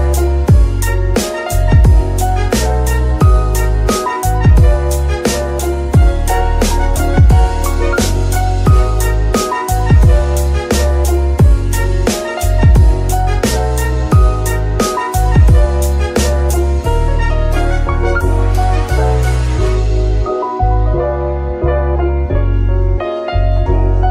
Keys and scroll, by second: 2.0 g, 2.5 Escape, 6.7 g, 6.9 Escape, 12.0 ctrl+Tab, 16.0 g, 18.3 Escape, 20.1 g, 22.1 g, 22.7 Escape.